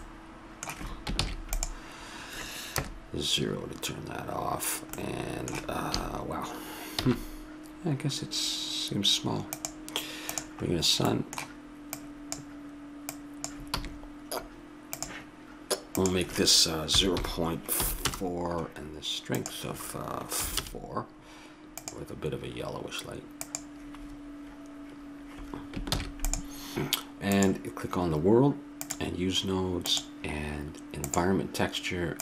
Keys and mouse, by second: 1.3 ctrl+s, 2.8 KP_0, 7.0 shift+a, 10.7-11.9 middle drag, 11.9-14.9 drag, 13.8 r, 16.0-17.8 drag, 19.4-23.7 drag, 25.9 ctrl+s, 27.3-29.2 drag.